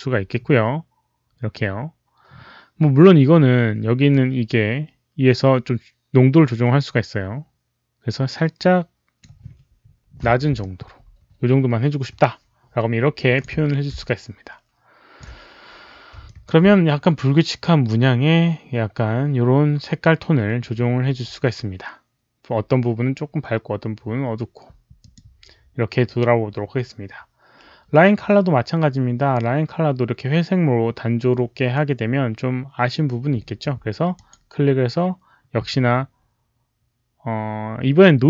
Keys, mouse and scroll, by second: 4.0-9.1 drag, 10.5-13.3 alt+drag, 14.0-15.1 alt+drag, 16.2 alt+click, 24.9 alt+click, 34.0 click.